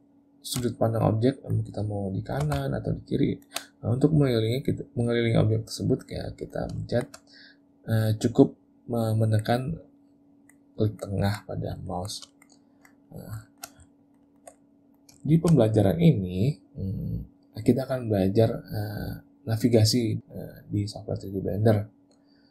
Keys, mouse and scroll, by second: 0.3 middle click, 0.8 shift+middle click, 1.8 middle click, 4.2 middle click, 6.3 middle click, 6.9 shift+middle click, 7.3 middle click, 10.1 middle click, 10.8 middle click, 11.2 middle click, 11.9 shift+middle click, 12.3 middle click, 12.6 middle click, 13.1 middle click, 13.5 shift+middle click, 13.9 ctrl+middle click, 14.1 ctrl+middle click, 14.3 ctrl+middle click, 14.6 middle click, 15.2 shift+middle click.